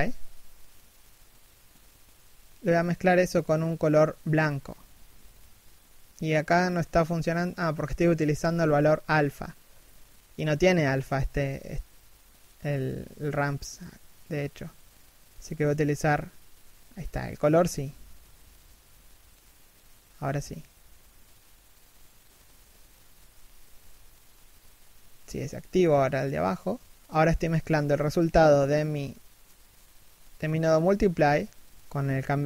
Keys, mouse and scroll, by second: 26.0 right click, 26.1 r.